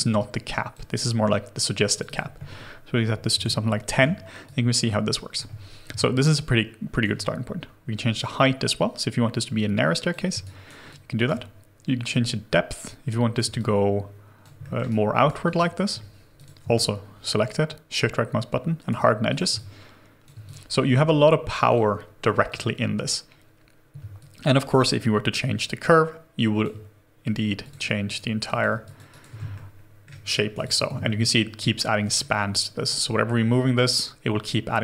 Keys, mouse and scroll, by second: 2.0 double click, 3.3 1, 3.3 Return, 4.4 alt+click, 5.9 alt+click, 10.4 alt+right click, 10.8 alt+click, 13.5 alt+click, 14.8 alt+right click, 15.4 alt+click, 16.8 shift+right click, 19.5 alt+click, 24.1 alt+click, 28.0 right click, 28.8 alt+click, 29.1 alt+right click, 29.5 shift+middle click, 30.2 scroll down 1, 30.5 scroll, 30.6 alt+click, 31.0 shift+middle click.